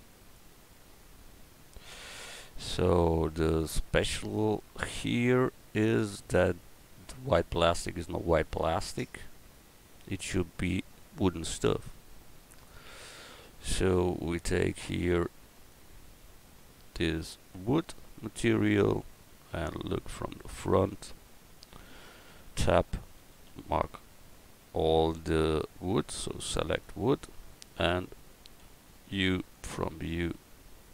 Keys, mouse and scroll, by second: 2.4 Tab, 2.8 Tab, 22.2 Tab, 23.2 a, 23.5 a, 24.5 a, 26.8 click, 28.6 u.